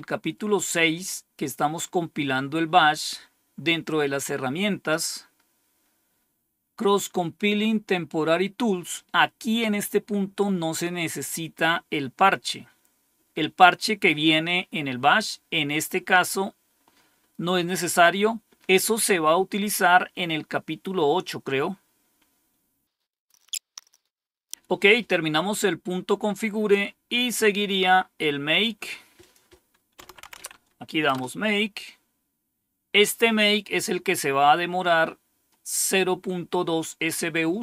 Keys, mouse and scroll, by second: 21.8 scroll down 1, 22.3 scroll down 2, 23.0-26.1 scroll down 2, 26.1 scroll down 1, 27.2-27.9 scroll down 3, 29.1 click, 29.7-30.8 typing, 31.0 Return, 33.5-34.2 typing.